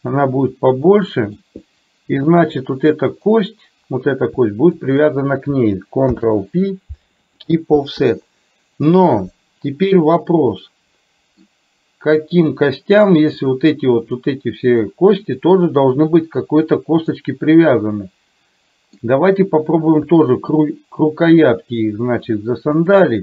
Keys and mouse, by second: 1.1 middle click, 1.8 middle click, 3.2 click, 4.9 shift+click, 6.2 ctrl+p, 8.3 middle click, 9.9-11.4 middle drag, 12.4 click, 13.4 click, 14.2 click, 14.8 click, 15.3 click, 17.2-19.1 middle drag, 19.7 click, 20.6 shift+click, 21.4 shift+click, 22.8 shift+click.